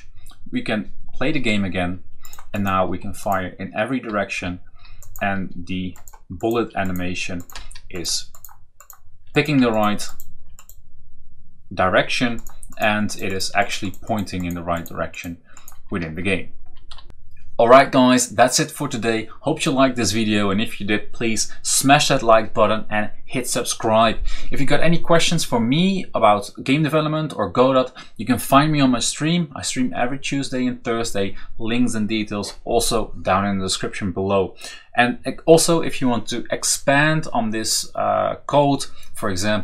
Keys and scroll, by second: 2.7 Down, 2.8 Left, 3.0 Left, 4.8 Down, 4.9 Down, 5.0 Down, 7.4 Up, 7.7 Up, 9.4 Down, 9.5 Down, 10.3 Right, 10.4 Right, 10.5 Right, 12.2 Right, 15.7 Down, 15.8 Right, 16.8 Right.